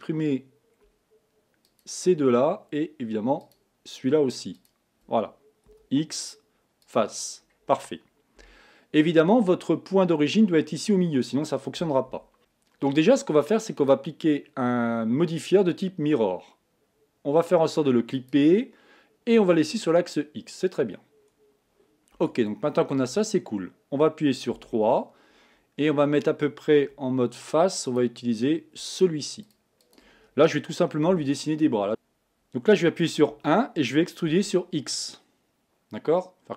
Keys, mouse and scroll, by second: 1.6 shift+click, 3.4 shift+click, 4.6 shift+click, 5.7 x, 7.4-8.4 scroll down 1, 8.4 KP_1, 9.7-10.8 scroll down 2, 12.1 Tab, 12.4 click, 13.8-16.8 drag, 18.2-21.2 drag, 22.1 Tab, 24.5 KP_3, 26.8 3, 27.9 click, 28.9 shift+click, 29.4 shift+click, 29.8 shift+click, 31.1 KP_1, 31.9 z, 33.3 e.